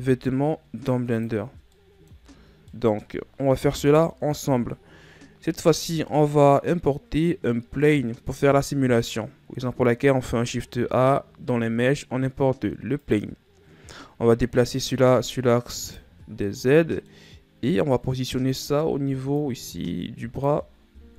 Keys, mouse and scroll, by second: 2.4-2.8 middle drag, 2.8 a, 3.2 scroll down 2, 3.3-4.4 middle drag, 4.4 KP_1, 10.9 shift+a, 15.2 click, 17.1-18.5 middle drag, 18.5 click.